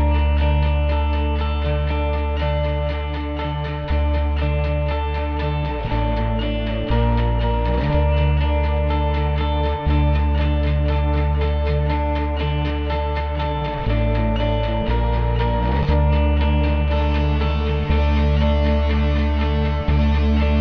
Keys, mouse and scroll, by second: 4.0 ctrl+s, 4.6 z, 4.8 click, 6.5 click, 6.5 ctrl+s, 8.3-9.6 typing, 10.9 click, 12.2-14.7 typing, 12.7 click, 15.8 typing.